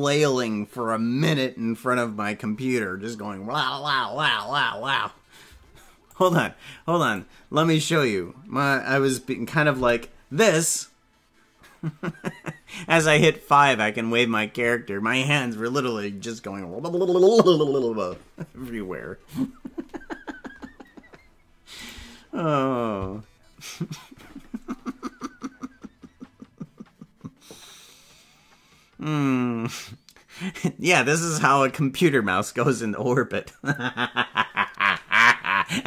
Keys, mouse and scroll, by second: 21.8 click.